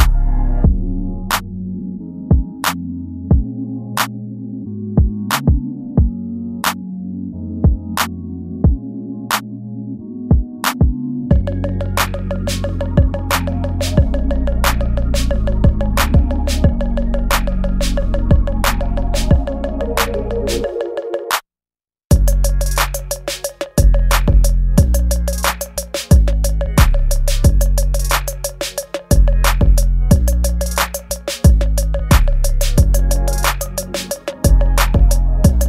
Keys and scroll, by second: 0.6 space, 1.1 ctrl+z, 1.3 space, 1.8 space, 2.4 ctrl+z, 3.7 space, 4.6 space, 5.3 space, 6.6 space, 8.9 space, 10.2 space, 13.1 space, 14.1 space, 15.8 space, 16.8 space, 18.6 space, 19.4 ctrl+z, 19.9 space, 20.8 ctrl+z, 23.2 space, 27.6 space, 28.6 ctrl+z.